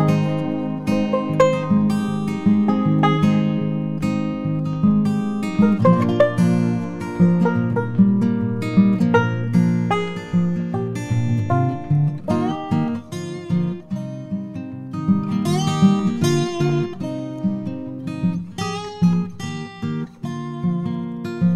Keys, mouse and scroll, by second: 0.3 g, 8.2 click, 12.3 alt+z, 13.0-17.0 drag, 13.8 alt+z, 13.9 g, 18.7 click.